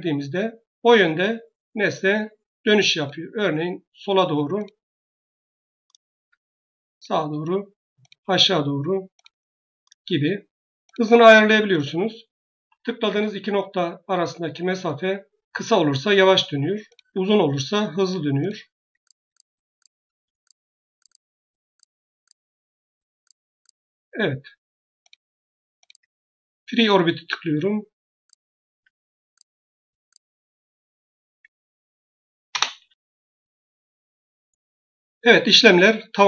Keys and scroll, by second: 32.4 Return.